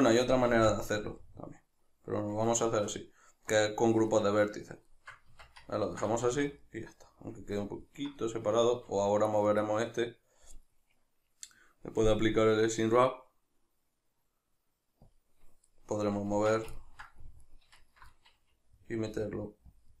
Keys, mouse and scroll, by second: 0.6 ctrl+r, 2.4 click, 2.7-9.3 shift+middle drag, 5.3 Tab, 6.2 a, 9.3 right click, 9.7-10.6 middle drag, 10.6 right click, 11.6-15.1 middle drag, 15.1 click, 16.0-17.4 shift+middle drag, 16.4 Tab, 17.4 alt+right click, 18.2-19.8 middle drag, 19.1 g, 19.8 click.